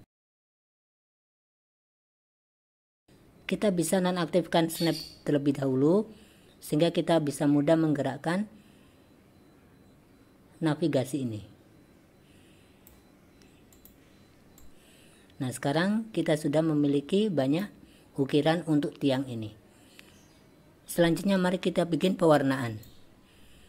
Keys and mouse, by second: 0.1-2.0 drag, 2.5 click, 5.0 click, 6.7-13.2 drag, 13.8 click, 14.7-17.7 drag, 22.8 click.